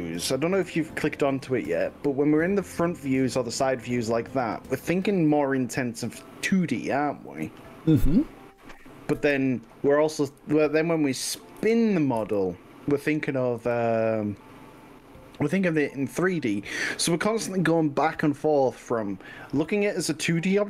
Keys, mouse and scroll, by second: 0.7 g, 2.9 click, 3.1-6.3 middle drag, 9.2 KP_4, 10.4 KP_6, 11.6 KP_3, 12.2 KP_6, 12.2 KP_1, 13.7 g, 19.9 click.